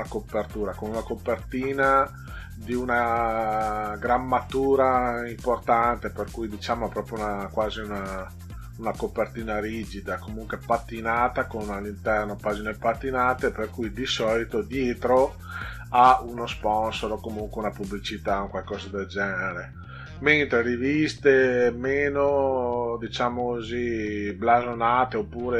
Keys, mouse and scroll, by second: 14.1-15.0 scroll down 6, 17.0 scroll down 2.